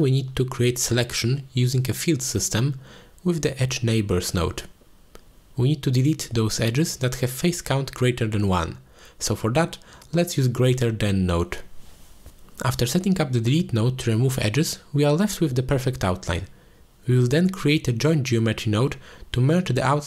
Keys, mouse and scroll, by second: 2.4 click, 3.0 middle click, 3.6 shift+a, 8.1 click, 8.8 click, 9.1-11.0 drag, 12.3 click, 12.8 click, 13.4-13.9 drag, 14.5 click, 16.2 click, 16.6-17.5 drag, 18.0 click, 18.7-19.5 drag, 19.5 shift+a.